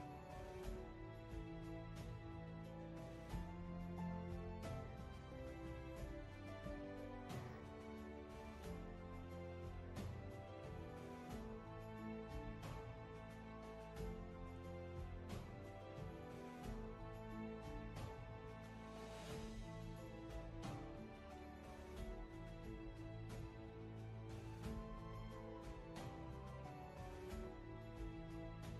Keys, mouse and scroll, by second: 22.4 ctrl+z, 22.9 space.